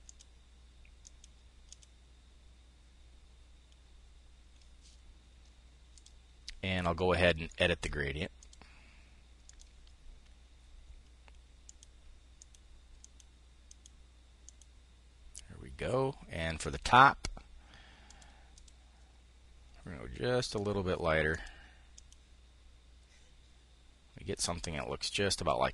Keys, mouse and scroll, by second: 7.1 click, 12.6 click, 13.2 click, 14.0 click, 16.4-17.8 drag, 18.1 click, 20.0 click, 20.8 click, 21.5 click.